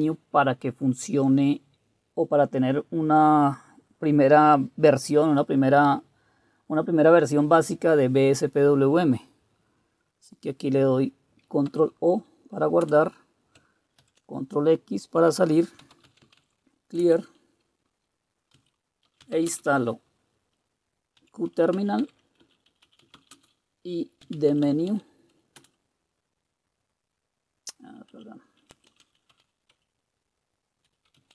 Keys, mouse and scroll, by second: 11.7 ctrl+o, 12.8 Return, 14.0 ctrl+x, 15.6-16.9 typing, 17.0 Return, 18.3-19.8 typing, 20.9-26.1 typing, 27.9-31.3 typing.